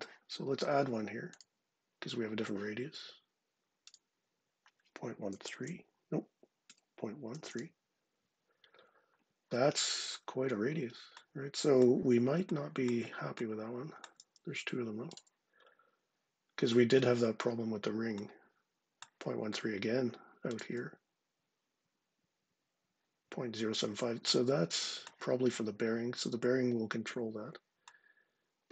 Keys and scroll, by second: 4.8-7.6 typing.